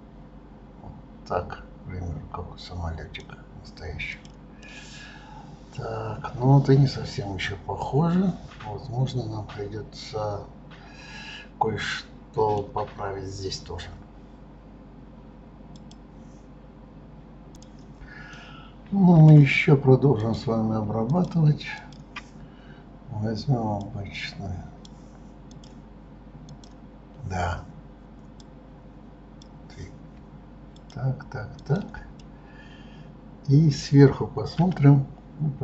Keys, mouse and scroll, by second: 3.9 click, 4.5-7.6 middle drag, 18.3-20.2 middle drag, 20.2 click, 21.1 shift+click, 21.8 shift+click, 23.8-24.9 drag, 25.5 click, 26.5 click, 28.4-30.9 drag, 31.6 shift+click, 32.2-34.6 middle drag, 34.6 KP_7.